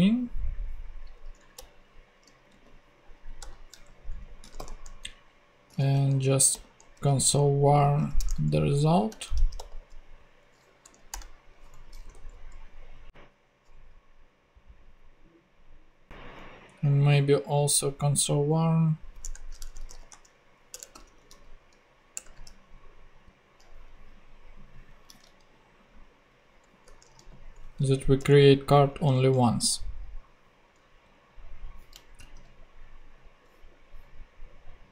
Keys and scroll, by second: 1.5 Return, 2.4 super+Return, 2.5 super+v, 3.4 super+Return, 4.4 c, 5.4-7.7 typing, 8.1 Return, 9.1 c, 9.3 r, 10.8 Down, 11.1 Return, 11.6 super+Return, 11.7 super+Right, 12.1 super+;, 19.2 Return, 19.6-21.8 typing, 22.1 Return, 26.8 ', 27.8 super+Right, 28.2 super+;, 29.0 ;, 29.3 super+Tab, 32.2 ctrl+super+z.